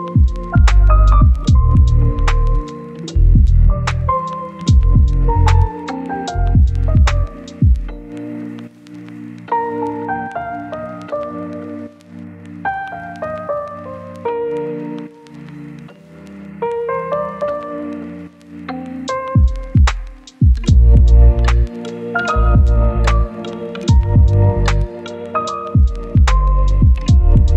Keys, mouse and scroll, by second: 4.4 right click, 4.8-6.8 scroll up 1, 7.1 click, 8.1 scroll down 1, 8.3 right click, 9.1 scroll up 1, 9.2 right click, 9.6 scroll up 1, 9.9 click, 10.3 scroll up 1, 10.4 click, 12.2 scroll down 1, 12.3 scroll up 1, 12.5 right click, 13.3 scroll down 1, 13.4 scroll up 1, 13.5 right click, 14.3-14.6 scroll down 1, 14.6 right click, 15.0 scroll up 1, 15.2 right click, 16.2 scroll down 1, 16.3 scroll up 1, 16.4 right click, 17.4 click, 17.9 scroll down 1, 18.1 right click, 18.3-19.0 scroll up 2, 18.5 right click, 19.0 click, 19.2 right click, 19.6 scroll down 1, 19.8 scroll up 1, 20.1 right click, 20.4 scroll up 1, 20.7 click, 21.0 right click, 21.7 scroll up 1, 21.8 right click, 22.1 scroll down 1, 22.2-22.6 scroll up 1, 22.6 right click, 23.5 click, 23.8 scroll down 1, 24.0 right click, 25.4 scroll down 1, 25.6-25.9 scroll up 1, 25.9 right click, 26.5 click, 26.8-27.5 right drag.